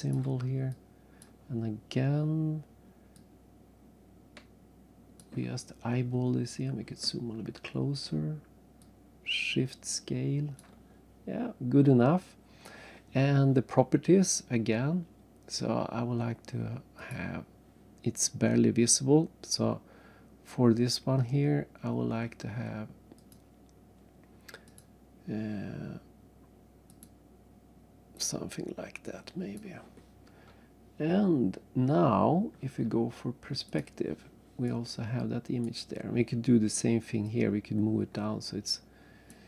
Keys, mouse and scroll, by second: 0.7 click, 3.1 click, 6.2-6.5 scroll up 2, 8.8 shift+click, 17.0 click, 23.2 click, 24.7 click, 26.9 click, 28.2 click, 32.3-33.5 scroll down 1, 33.8 click, 34.6 right click, 37.2 click.